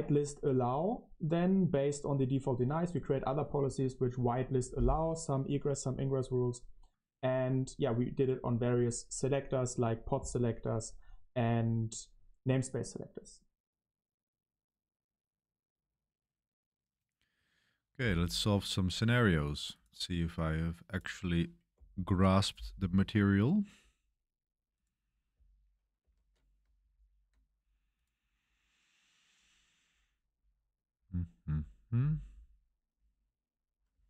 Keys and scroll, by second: 26.0 ctrl+alt+shift+1, 26.4 ctrl+alt+shift+1.